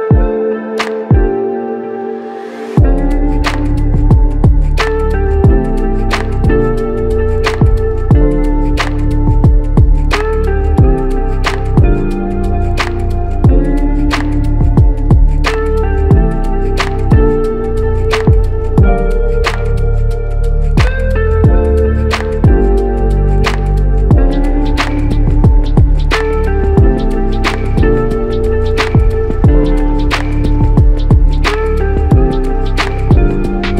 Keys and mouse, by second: 10.5 shift+click, 12.2 alt+click, 12.9 shift+click, 16.0 alt+click, 16.5 shift+click, 17.6 shift+click, 19.6 alt+click, 25.1 alt+click, 30.4 alt+click.